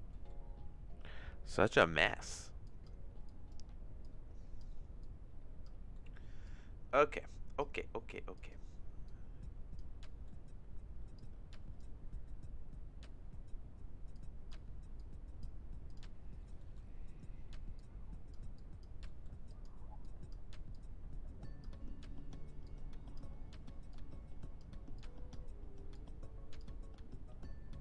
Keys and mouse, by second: 0.2 middle click, 2.2 click, 2.6 click, 3.2 click, 4.0 click, 5.0 click, 6.0 middle click, 6.4-7.6 drag, 8.3 click, 9.0 click, 10.1 middle click, 11.1 click, 14.1 click, 15.1-16.1 drag, 17.7 click, 18.5 click, 19.2 middle click, 19.5 click, 20.0 click, 20.7 click, 22.6 click, 24.0 click, 25.0 click, 25.9 click.